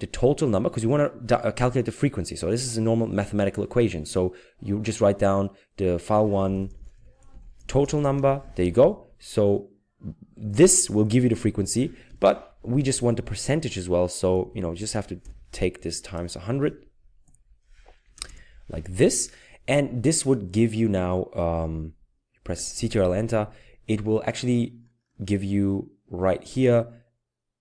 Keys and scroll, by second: 6.5-7.8 typing, 8.1 Tab, 12.1 typing, 12.7 Left, 13.3-13.7 typing, 18.0 typing, 22.5 ctrl+Return.